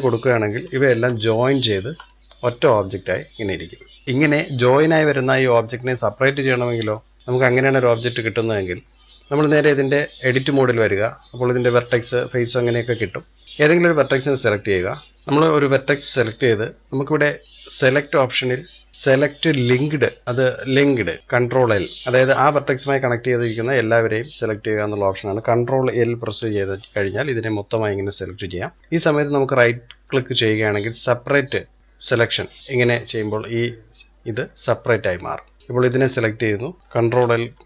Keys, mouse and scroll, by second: 0.3 ctrl+j, 1.0-1.6 scroll up 1, 1.6-2.9 shift+middle drag, 2.9 click, 3.6 click, 6.6 click, 9.2-10.8 drag, 10.8-12.4 scroll up 1, 12.4-12.8 scroll down 1, 12.8-13.9 middle drag, 13.9 click, 16.0 click, 17.6 click, 23.4-24.6 scroll up 1, 26.2 ctrl+l, 28.8 right click, 33.0-34.3 scroll down 1, 34.3 middle click, 35.0-35.7 scroll up 1, 35.7 click, 37.0 ctrl+l.